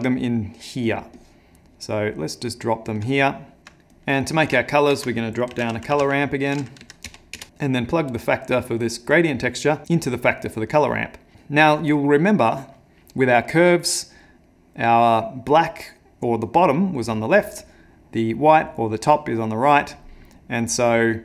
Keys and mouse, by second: 0.9 click, 1.2 click, 2.2 click, 3.0 click, 3.6 ctrl+middle click, 3.9 click, 4.8 ctrl+shift+a, 7.5 click, 7.9 click, 10.8 click, 11.3 ctrl+middle click, 14.4 middle click, 20.8 click.